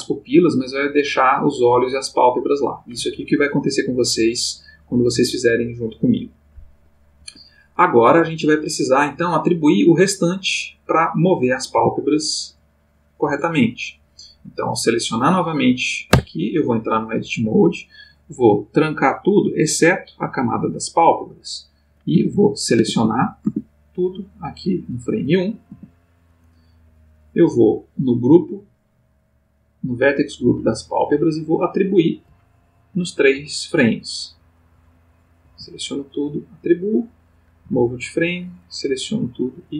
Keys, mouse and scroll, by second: 7.2 Escape, 8.3 click, 11.1 click, 11.7 g, 13.2 Escape, 14.6 click, 16.1 Tab, 18.5 click, 19.7 click, 22.1 a, 24.3 click, 25.7 a, 27.6 middle click, 28.2 middle click, 28.8 middle click, 30.7 click, 31.8 click, 33.3 Right, 35.4 a, 36.5 click, 37.6 Right.